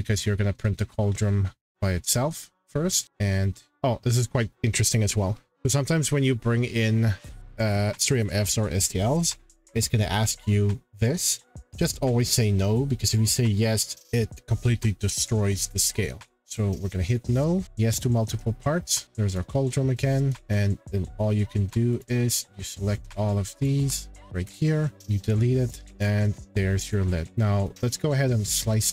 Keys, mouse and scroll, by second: 3.1 scroll, 3.7 click, 7.2-8.4 drag, 16.5 click, 17.7 click, 19.3 click, 20.4-20.9 scroll down 4, 21.3 scroll up 1, 21.5 scroll, 22.0 click, 22.4 scroll, 23.6 shift+click, 24.4 Delete, 25.0 click, 25.6 click, 25.7 shift+click, 26.0 click, 26.1 shift+click, 26.9 click, 27.0 shift+click, 27.7 click.